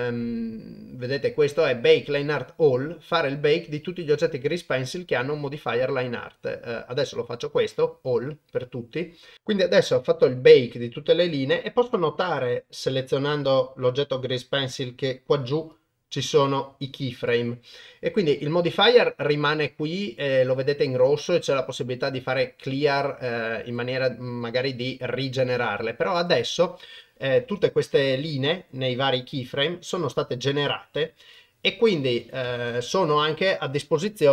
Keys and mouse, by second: 7.7 click, 12.3 click, 13.4 click, 15.7-17.3 drag, 23.6 click, 26.2 click, 27.5 KP_0, 29.1-31.4 drag.